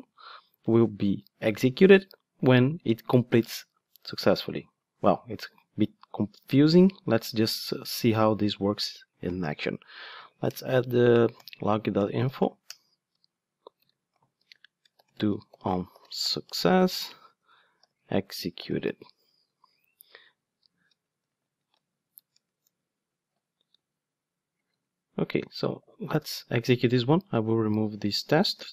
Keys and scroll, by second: 6.5 ctrl+Tab, 10.4 Return, 28.6 super+/.